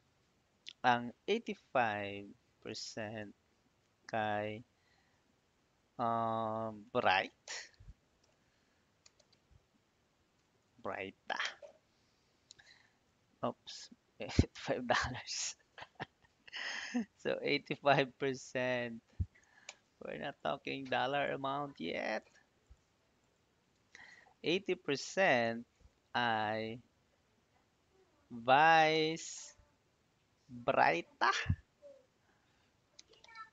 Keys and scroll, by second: 1.2 8, 1.5 5, 2.8 shift+4, 3.1 Tab, 6.7-10.6 typing, 11.3 Return, 16.5 8, 17.4 5, 19.0 shift+5, 19.5 Return, 24.0-25.1 typing, 25.6 Tab, 28.3-30.3 typing, 31.6 r, 32.6-33.5 typing.